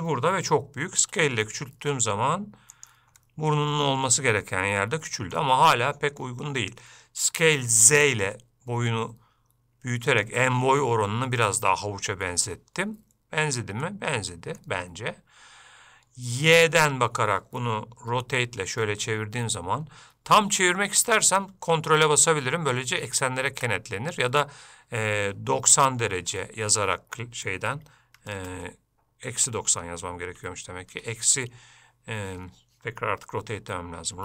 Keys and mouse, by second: 3.4 middle click, 5.0 shift+middle click, 5.9 middle click, 14.0 middle click, 16.6-18.3 drag, 32.6 Escape.